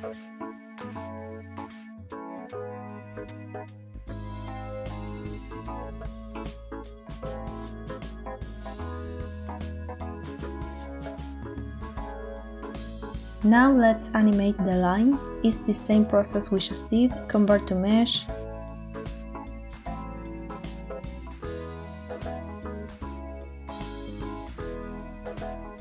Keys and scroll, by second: 0.1 |, 2.0 i, 7.8 0, 10.6 space, 18.7 Tab, 19.6 a, 20.4 F3.